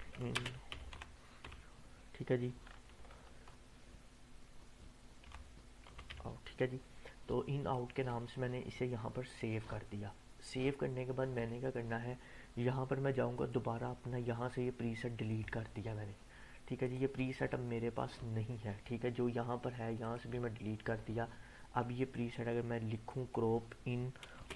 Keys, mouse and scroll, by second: 0.0-1.4 typing, 2.8 BackSpace, 5.2-6.6 typing, 7.7-8.3 drag, 13.3 right click, 15.3 click, 20.0 click, 20.2 Delete, 21.7-22.4 drag, 24.3-24.5 typing.